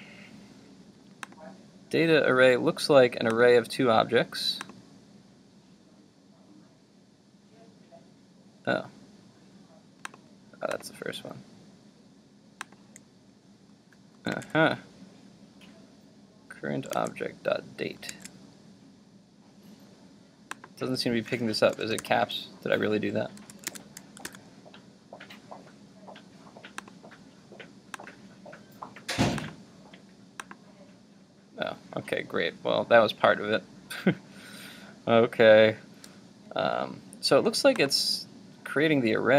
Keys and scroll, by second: 14.3 super+Tab, 23.4 super+s, 23.8 super+Tab, 24.3 super+r.